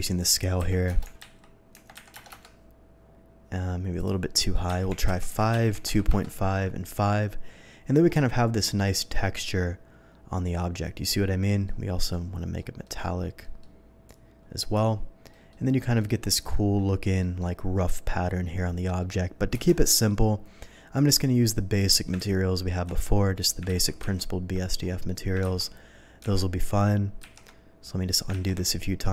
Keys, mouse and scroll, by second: 0.5 KP_1, 1.1 Tab, 1.3 KP_5, 1.7 Tab, 2.0 KP_1, 2.1 KP_0, 2.3 Return, 4.0 click, 4.7 KP_5, 4.9 Tab, 5.2 KP_2, 5.4 KP_Decimal, 5.5 KP_5, 5.7 Tab, 6.1 Return, 8.1 n, 11.5 middle click, 12.1 middle click, 12.8 middle click, 13.4 middle click, 14.1 click, 15.3 middle click, 16.0 middle click, 16.2-16.8 scroll up 1, 16.8-17.2 scroll up 1, 17.2 middle drag, 18.4-19.5 scroll down 1, 19.7 KP_0, 21.0 click, 21.7 click, 22.3 ctrl+z, 23.7 ctrl+z, 28.5 ctrl+z.